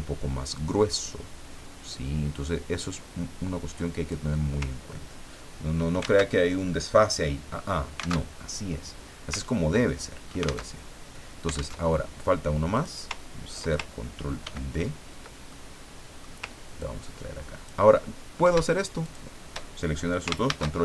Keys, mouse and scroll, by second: 0.5-4.3 drag, 4.8-5.1 ctrl+scroll down 2, 6.3 alt+Tab, 8.2 alt+Tab, 9.4 ctrl+scroll down 2, 9.9 ctrl+click, 10.7 alt+Tab, 11.8 alt+Tab, 12.7 click, 14.4 ctrl+d, 14.7 ctrl+scroll up 2, 15.5-16.6 ctrl+middle drag, 16.8-17.9 ctrl+drag, 19.0 shift+click, 20.5 ctrl+shift+a.